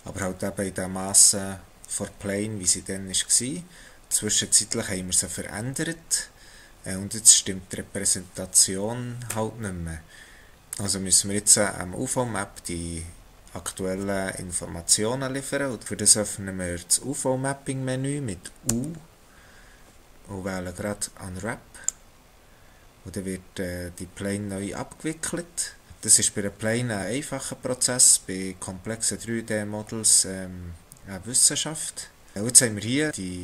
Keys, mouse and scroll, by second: 4.0 scroll down 2, 4.1 shift+middle click, 18.7 u, 31.2-32.3 scroll down 1.